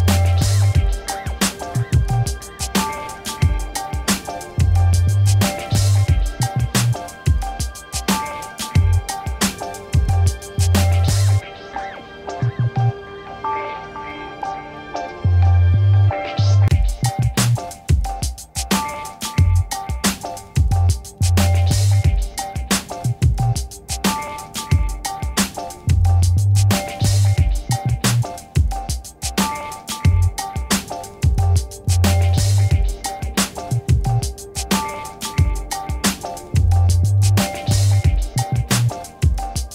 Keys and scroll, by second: 7.6 6, 14.3 ctrl+h, 23.9 ctrl++, 27.2 BackSpace, 27.8 ctrl+d, 28.1 ctrl+-, 29.9 ctrl+-, 37.0 l, 37.5 g, 38.3 Return.